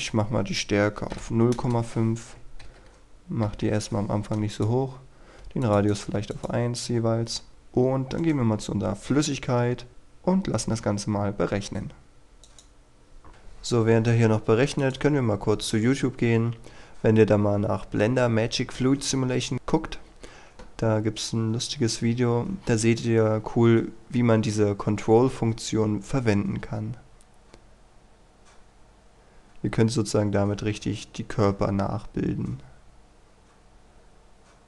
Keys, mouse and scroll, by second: 1.2 KP_5, 1.5 Return, 4.5 click, 5.4 KP_1, 5.6 click, 6.1 KP_1, 6.3 click, 8.1 right click, 12.4 click.